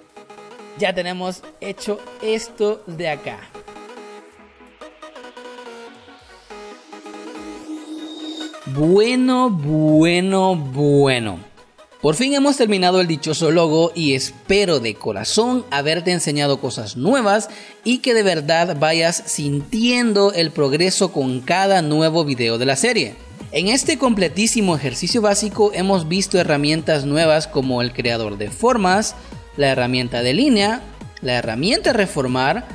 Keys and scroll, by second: 5.2 space.